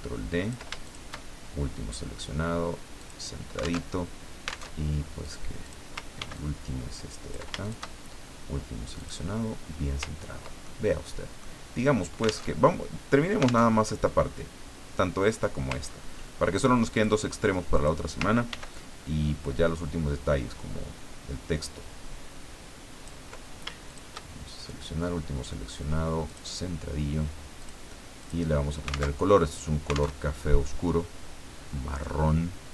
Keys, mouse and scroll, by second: 0.9 ctrl+shift+click, 3.0 click, 3.8 alt+Tab, 4.7 alt+Tab, 5.3 click, 6.2 ctrl+d, 6.3-7.5 ctrl+drag, 7.6 ctrl+shift+click, 9.0 click, 10.0-10.6 ctrl+scroll down 2, 10.6-11.9 ctrl+drag, 12.5 alt+Tab, 13.6 alt+Tab, 15.8 ctrl+scroll up 2, 16.9 click, 17.7 click, 18.5 ctrl+d, 18.7-23.3 ctrl+drag, 23.9 shift+click, 26.3 click, 27.6 click, 28.2 click, 29.2 alt+Tab, 30.1 alt+Tab, 32.0-32.7 drag.